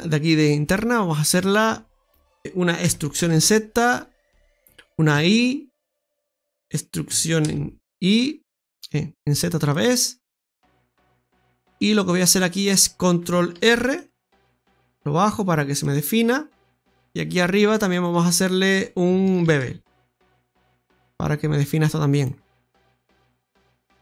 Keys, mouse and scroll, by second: 1.2 click, 1.8 right click, 2.4 middle click, 2.8 e, 5.1 i, 7.0 e, 9.8-10.2 scroll up 2, 10.6 shift+middle click, 11.2 middle click, 13.5 ctrl+r, 16.8 right click, 17.7 right click, 17.9 alt+shift+right click, 22.4-23.0 scroll down 2, 23.0 middle click.